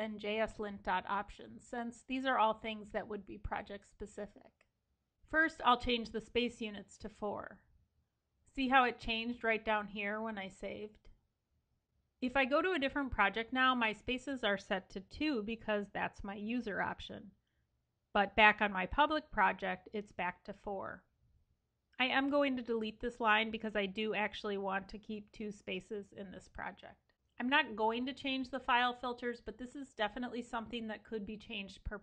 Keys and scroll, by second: 22.5 super+x, 23.4 super+s.